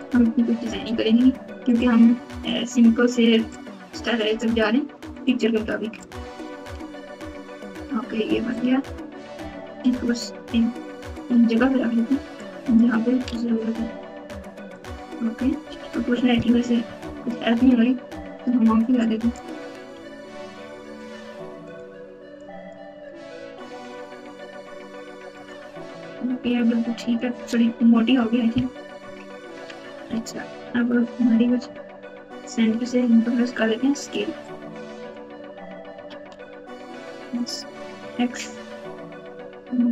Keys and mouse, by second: 0.8 g, 2.7 click, 4.3 g, 6.0 click, 6.7 g, 8.5 click, 9.8 g, 12.4 click, 13.2 g, 16.8-17.5 ctrl+KP_8, 19.0 click, 19.9 g, 22.5 click, 23.3 g, 29.0-29.6 ctrl+KP_8, 30.1 alt+z, 30.8 Tab, 31.4 Tab, 32.7 alt+z, 34.4 click, 34.6 click, 35.9 s, 37.9 s.